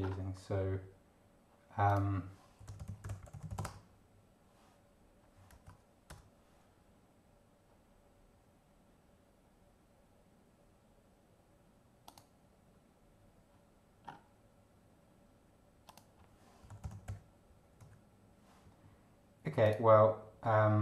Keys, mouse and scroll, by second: 1.9 click, 2.3-4.0 typing, 5.7 Return, 12.1 click, 14.0 scroll up 1, 15.8 click, 16.3-17.7 typing, 19.6 click.